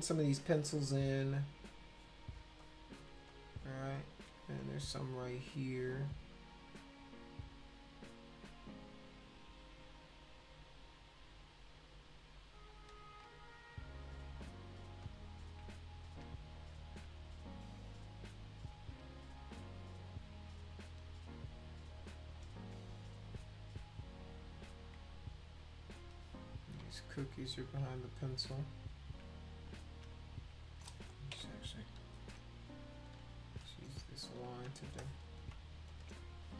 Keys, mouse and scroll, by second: 0.5 click, 1.4 click, 2.6 click, 3.3 click, 7.9-9.2 drag, 9.9 click, 12.7 click, 15.0 shift+click, 16.1 click, 16.6 shift+click, 18.7 click, 19.2 shift+click, 22.1 click, 22.4 shift+click, 23.4 click, 24.4 click, 24.5 click, 24.7 click, 24.9 click, 26.5 click, 27.2 shift+click, 28.1 click, 28.8 shift+click, 29.6 click, 30.1 shift+click, 31.3 ], 32.1 click, 32.7 shift+click, 33.5 click, 34.1 shift+click, 34.8 space, 35.0 click, 35.9 click, 36.3 shift+click.